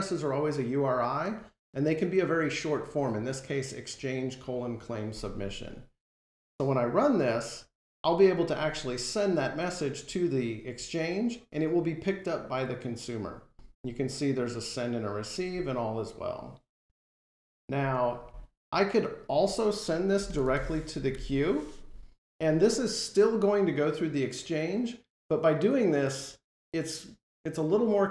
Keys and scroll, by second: 7.4 F5.